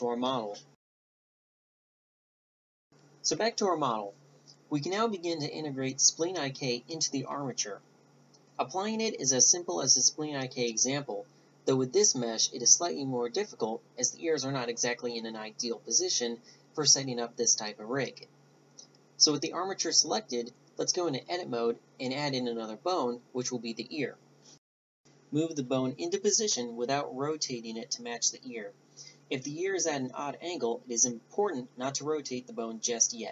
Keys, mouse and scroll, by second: 2.8 shift+c, 8.2 click, 19.0-19.6 drag, 20.0-21.5 drag, 21.5 g, 22.6-23.8 middle drag, 23.8 click, 24.3 click, 25.9 g, 26.1-28.2 middle drag, 28.8 middle click, 29.5 g, 29.8 middle click, 30.4 click, 31.1 middle click, 31.2-32.4 drag, 31.2 right click.